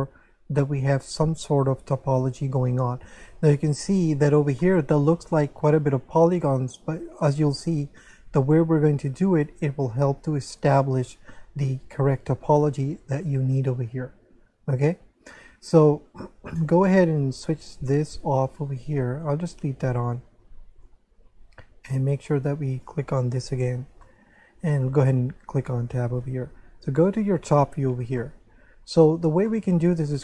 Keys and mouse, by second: 4.7 middle click, 10.8 middle click, 18.1 click, 20.7 click, 22.7 click, 24.0 shift+middle click, 24.9 Tab, 27.2 7, 28.2 shift+middle click, 29.5 shift+middle click.